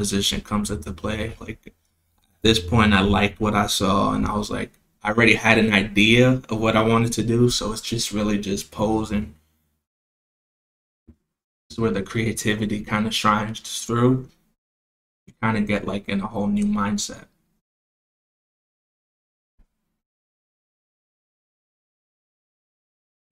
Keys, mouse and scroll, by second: 0.3 click, 0.8 middle click, 1.0-2.0 scroll down 4, 1.6-2.0 middle drag, 2.8-3.4 drag, 4.0 KP_0, 6.1 click, 8.0 click, 9.0 r, 15.3 click, 16.5 click, 18.5 click, 19.9 click, 21.5 click.